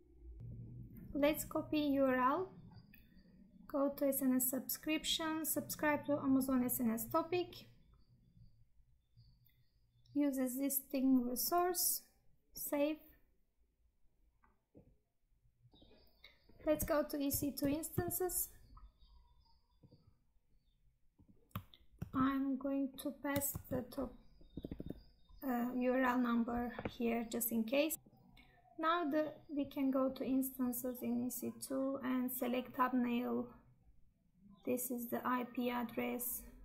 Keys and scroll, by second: 22.0 ctrl+v, 23.5 ctrl+v.